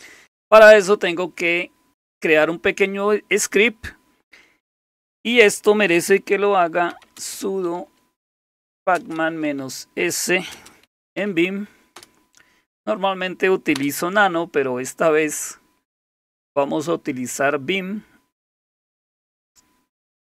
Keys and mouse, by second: 5.9-11.7 typing, 12.0 Return, 13.8 Return.